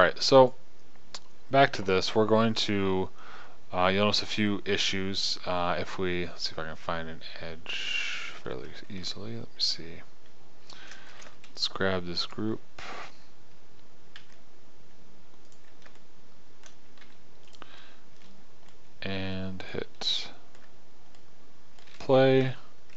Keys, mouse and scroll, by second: 0.9-3.1 right drag, 11.6 shift+g, 14.6 g, 17.5 g.